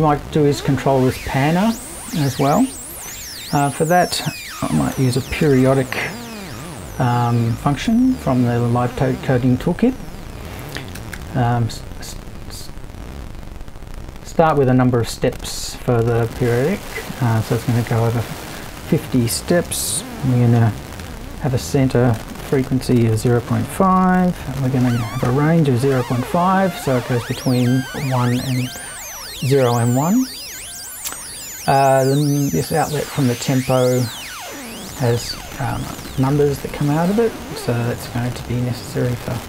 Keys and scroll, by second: 3.1 super+i, 4.5-6.5 typing, 7.8 space, 10.7-11.6 typing, 19.7-22.2 typing, 23.3-26.4 typing.